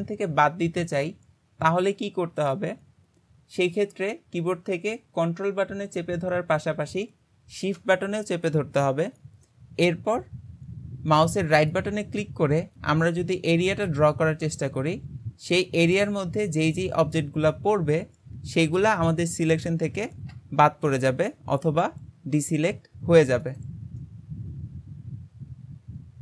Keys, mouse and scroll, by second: 11.7-14.9 ctrl+right drag, 24.1-26.2 middle drag.